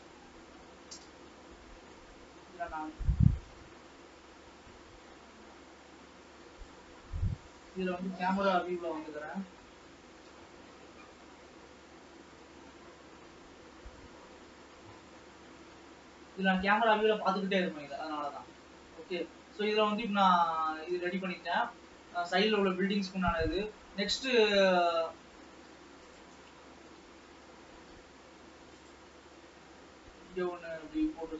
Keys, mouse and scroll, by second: 0.2-1.0 scroll down 1, 1.0 KP_0, 2.5 alt+a, 3.8-9.2 drag, 9.2 scroll down 3, 10.9 n, 11.1 t, 12.3 t, 13.5 n, 15.6 t, 16.2 scroll up 1, 17.9 ctrl+s, 17.9-18.7 scroll up 2, 18.8-21.0 middle drag, 21.0 ctrl+s, 21.4-21.9 scroll down 2, 23.3 scroll up 2, 23.7-25.4 middle drag, 25.4 Tab, 26.1 Tab, 26.5 click, 26.7 alt+a, 26.9 scroll down 1, 27.4 alt+a, 28.2 ctrl+r.